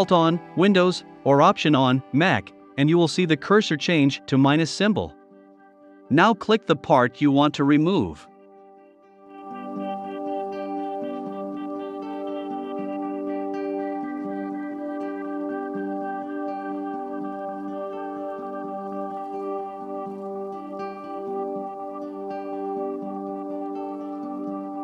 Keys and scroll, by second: 10.7 v, 15.1 super+[, 21.2 super+[, 21.9 super+[, 23.9 i.